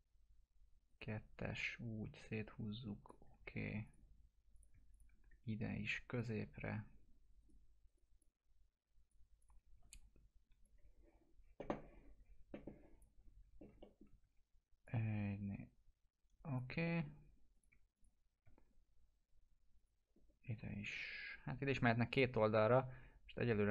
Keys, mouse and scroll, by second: 0.9 right click, 1.4-3.3 drag, 4.9 shift+click, 7.4 right click, 8.2-9.1 click, 9.7 e, 10.6-13.1 drag, 13.8 alt+middle click, 14.2 w, 14.8-16.7 drag, 16.8 alt+middle click, 17.5 click, 17.9 shift+click, 22.1 click.